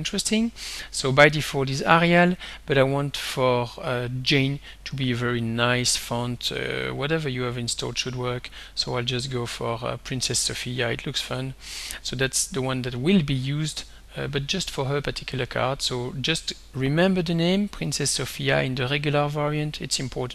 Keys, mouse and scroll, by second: 2.1 click, 4.6 scroll down 2, 5.3-5.8 scroll down 2, 9.1-9.5 scroll down 2, 11.3 click.